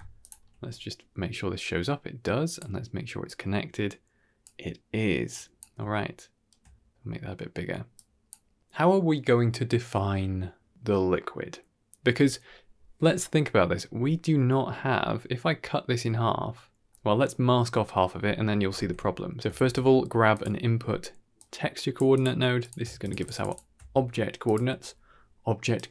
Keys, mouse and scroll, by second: 0.1 ctrl+shift+click, 2.4 click, 5.2-5.5 drag, 5.8-6.4 ctrl+middle drag, 7.8 click, 8.5 click, 16.1-16.5 scroll down 3, 16.5 middle click, 17.0 middle click, 17.4 middle click, 17.9 typing, 18.2 click, 19.4 shift+a, 22.9 ctrl+shift+click, 23.2 ctrl+shift+click, 23.4 ctrl+shift+click, 24.3 click, 24.7 g.